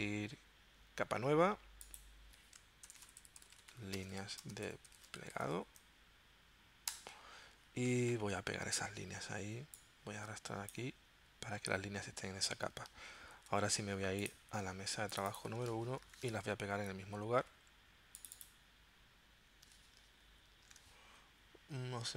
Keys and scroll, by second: 2.8-5.9 typing, 6.9 Return, 13.3 super+c, 16.0 shift+super+v, 20.2 shift+super+v.